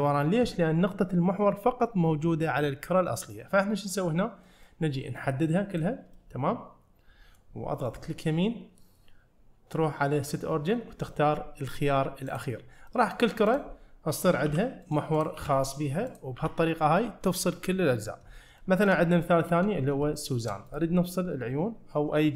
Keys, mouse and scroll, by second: 0.7 scroll up 1, 4.1-4.5 scroll down 1, 4.5 middle click, 5.2-5.8 drag, 6.2-7.4 middle drag, 7.9 right click, 11.2-12.9 drag, 12.9 middle click, 13.5 click, 14.5 g, 15.2 click, 15.4 g, 16.1 click, 16.4 g, 18.6-19.0 shift+middle drag, 19.0-19.3 shift+scroll down 1, 19.3 middle click, 19.8-20.1 scroll up 2, 20.1-20.5 shift+middle drag, 20.7 click.